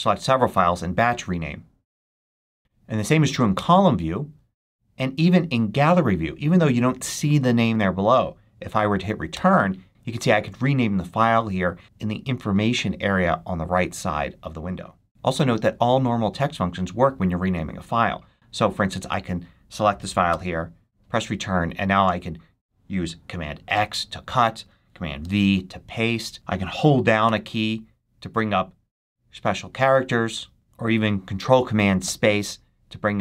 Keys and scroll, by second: 3.4 Return, 9.2 Return, 20.2 Return, 23.6 super+x, 25.1 super+v, 27.2 e, 31.9 ctrl+super+space.